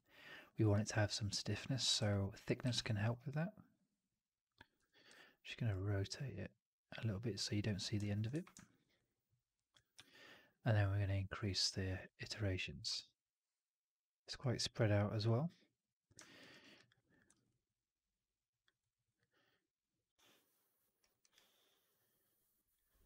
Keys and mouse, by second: 0.5 alt+middle drag, 0.6 alt+right drag, 0.8-1.7 alt+drag, 1.9 1, 2.5 r, 4.7 4, 5.0 e, 8.2 1, 8.5 alt+middle click, 8.8 alt+click, 9.8 4, 12.9-16.0 drag, 16.3 alt+right drag, 16.5 alt+right drag, 16.6 alt+drag, 17.0 drag, 17.2 alt+right drag, 17.4-18.5 alt+drag, 18.7 alt+right drag, 18.9 alt+right drag, 19.1-20.7 alt+drag, 20.9 alt+right drag, 21.1 alt+right drag, 21.2-23.0 alt+drag.